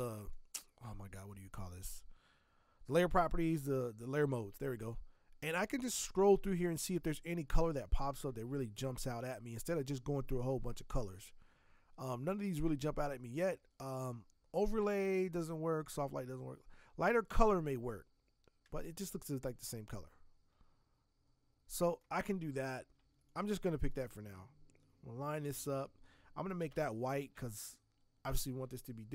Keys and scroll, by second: 26.7 alt+BackSpace, 27.3 ctrl+BackSpace.